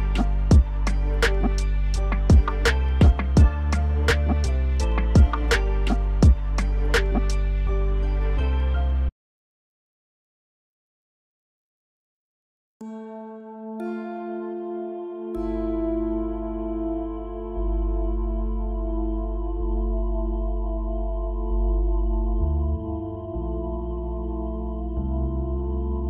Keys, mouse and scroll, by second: 1.2 g, 2.2 shift+z, 2.6 KP_7, 3.2-3.8 scroll down 1, 3.8 g, 4.9 s, 5.5 KP_1, 5.9-6.3 scroll up 6, 6.3-7.6 shift+middle drag, 7.6 KP_1, 8.5 g, 9.5-9.9 middle drag, 9.9 scroll up 3, 10.2-10.7 shift+middle drag, 10.7 s, 11.5 g, 12.6 shift+z, 12.8-13.4 scroll up 3, 13.4 s, 14.1 g, 17.0 scroll down 1, 17.2-18.4 middle drag, 18.4-19.6 scroll down 2, 20.9 KP_7, 21.4 shift+z, 21.7-22.2 shift+middle drag, 22.2 scroll up 3, 22.4-23.2 shift+middle drag, 23.2 g, 24.8 KP_1, 25.2-25.6 scroll down 2, 25.6-26.0 shift+middle drag.